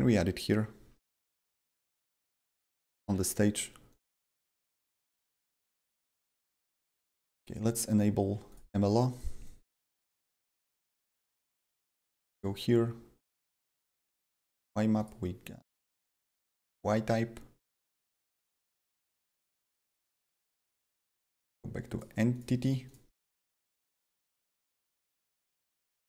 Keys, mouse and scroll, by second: 0.8 d, 1.7 w, 3.0-6.7 typing, 3.8 click, 3.9 click, 7.2 click, 8.4 click, 9.1 right click, 9.4 click, 9.6 a, 11.7 click, 12.2 a, 13.6 click, 14.3 click, 14.3 a, 14.9 click, 15.6 click, 17.9-21.9 drag, 21.9 click, 22.3 click, 23.3 click, 23.6-26.0 drag.